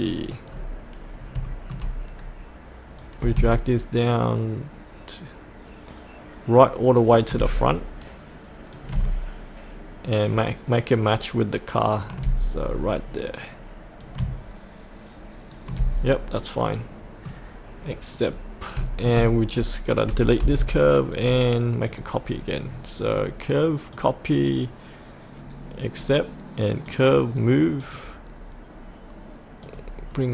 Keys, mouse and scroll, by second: 0.5-1.1 scroll down 1, 1.1 scroll up 1, 1.4 shift+middle click, 1.9 shift+middle click, 3.0-12.7 drag, 12.7-14.0 scroll down 1, 14.0 click, 15.8-16.6 scroll up 1, 16.6-18.1 middle drag, 18.1 click, 19.9 click, 20.4 Delete, 30.1-30.3 scroll down 1.